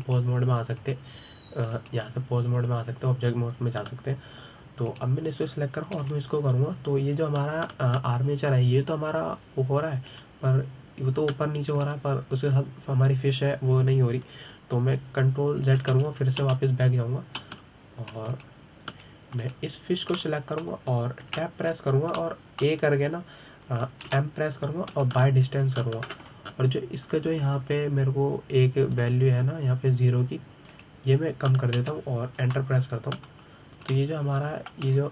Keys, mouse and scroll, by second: 1.8 click, 2.6-6.6 drag, 6.7 drag, 7.8 g, 17.5 ctrl+z, 17.8 ctrl+z, 19.3 ctrl+z, 20.1 click, 21.2 click, 22.0-23.1 shift+middle drag, 23.1 Tab, 24.0-25.9 middle drag, 25.9 m, 30.8-34.0 drag.